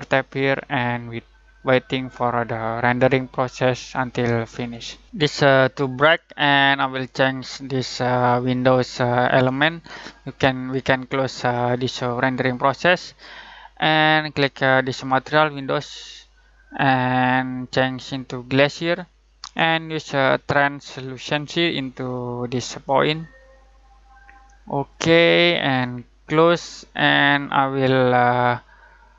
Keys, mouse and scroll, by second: 0.2 click, 12.5 click, 15.1 click, 21.2-29.1 drag.